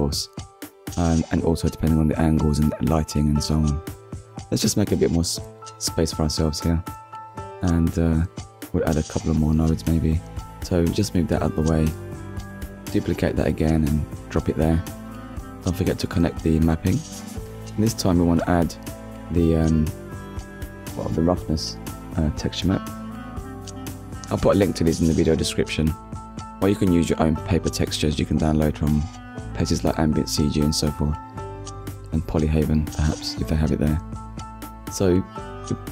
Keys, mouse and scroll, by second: 0.3 shift+middle click, 1.2 click, 1.5-2.0 scroll down 1, 2.7 click, 3.7 g, 4.6 click, 5.3 g, 6.4 click, 7.2-7.6 scroll down 2, 8.1 click, 11.4-11.8 scroll up 1, 13.1 shift+d, 14.8 click, 15.8 click, 17.5 click, 18.5 click, 22.5 click, 23.7 click, 24.9-25.3 scroll up 1, 25.6 click, 26.9 click, 28.2 click, 30.6 middle click, 32.1 scroll up 1, 33.5 scroll up 1, 35.5 ctrl+middle click.